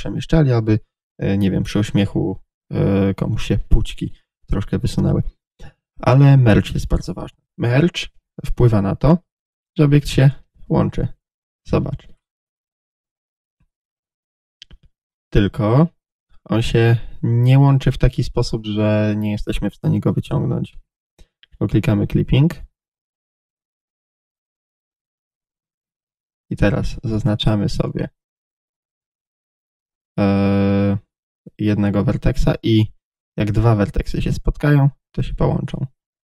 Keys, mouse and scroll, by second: 8.0 Tab, 9.3 g, 10.4 click, 10.6 z, 11.7-20.0 shift+middle drag, 12.1-13.6 scroll up 1, 14.0-14.4 scroll up 1, 15.1-16.4 scroll up 1, 16.4 g, 20.0 click, 20.1-22.2 middle drag, 22.2 click, 22.8 z, 24.4 click, 24.6-26.7 middle drag, 26.6 1, 26.7-27.9 right drag, 27.9 click, 29.0 g, 35.3 click, 35.4 g.